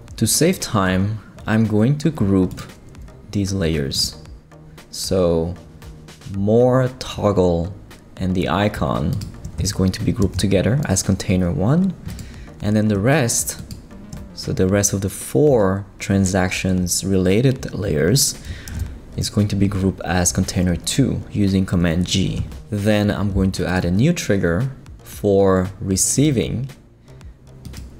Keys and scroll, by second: 10.2 shift+super+g, 18.7 super+g.